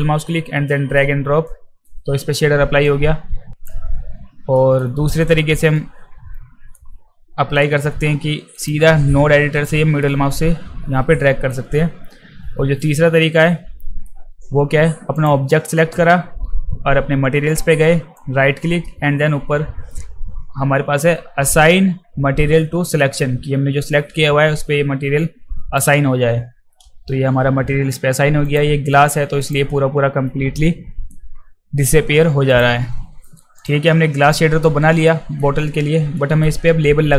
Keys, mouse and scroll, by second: 2.8-3.6 drag, 4.6 alt+middle click, 5.7 middle drag, 8.6 click, 10.0-11.5 middle drag, 13.2 middle click, 15.2 click, 18.2-25.8 right drag, 28.4 click, 29.4 click, 32.5 click, 33.6 click, 34.6-35.4 alt+middle drag, 36.2 alt+middle drag.